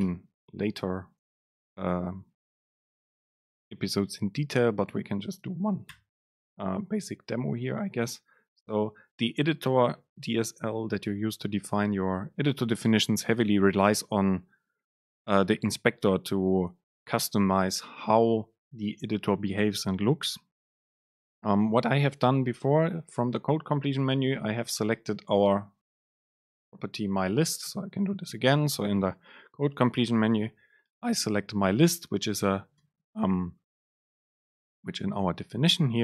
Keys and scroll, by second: 0.1 Return, 0.5 super+space, 11.7 Home, 23.5 super+space, 25.9 shift+Left, 26.7 BackSpace, 27.4 Return, 27.7 super+space.